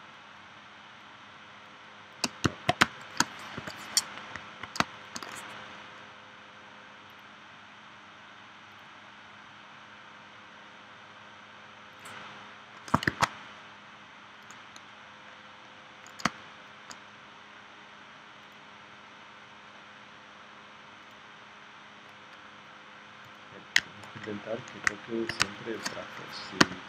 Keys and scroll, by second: 2.8 space, 3.6 p, 4.8 space, 13.1 shift+x, 16.2 space, 25.4 space, 26.6 v.